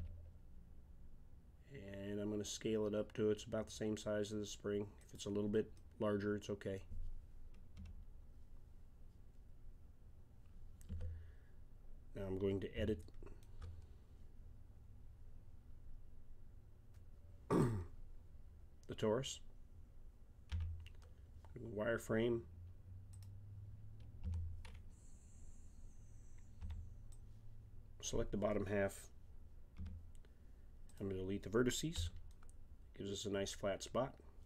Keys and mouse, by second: 5.7-7.8 middle drag, 7.8 KP_1, 10.9 Tab, 12.3 click, 20.5 z, 24.2 a, 26.6 b, 29.7 Delete, 32.0 z.